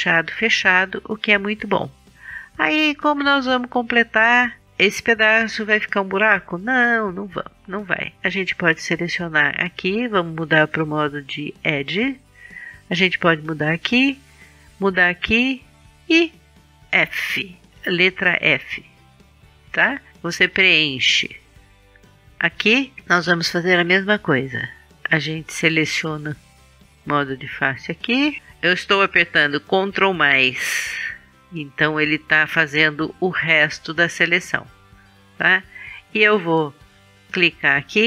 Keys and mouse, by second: 10.8 middle click, 12.9-14.3 middle drag, 17.7 f, 20.5 middle click, 20.7 middle click, 21.5 middle click, 21.8 middle click, 22.2 middle click, 22.6 middle click, 24.0 right click, 25.0-26.4 middle drag, 26.4-28.4 drag, 29.8 ctrl+KP_Add, 30.5 ctrl+KP_Add, 31.2 ctrl+KP_Add, 37.5-38.0 drag.